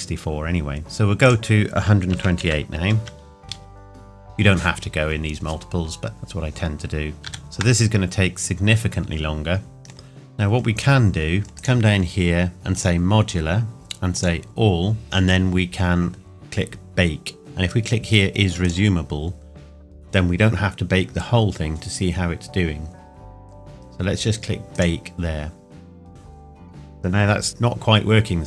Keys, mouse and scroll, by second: 1.2 click, 7.3 ctrl+s, 9.8-10.1 scroll down 1, 18.6 click, 24.7 click.